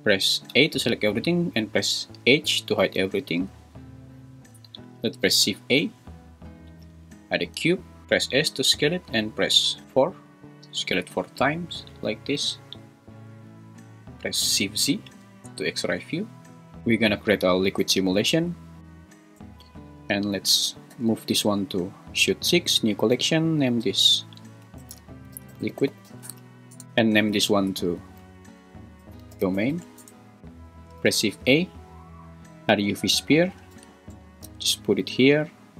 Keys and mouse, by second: 0.5 a, 2.5 h, 3.4 click, 5.2 shift+a, 8.0 Escape, 8.0 s, 10.7 4, 13.2 `, 14.7 shift+z, 20.9 m, 26.8 m, 27.5 F2, 31.0 shift+a, 33.7 g, 34.1 x.